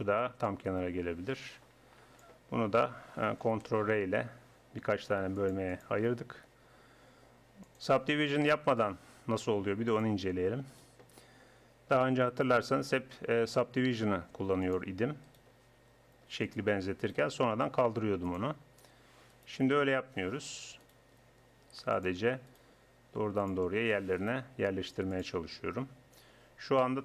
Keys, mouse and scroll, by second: 0.4-2.1 middle drag, 2.1 click, 2.6-3.6 middle drag, 3.6 ctrl+r, 7.7 click, 9.6 click, 9.8 right click, 10.2 click, 11.7 click, 12.0 right click, 12.3 g, 15.2-16.5 drag, 15.5 g, 17.4 g, 19.8 g, 21.2 g, 22.7 g, 24.4 g.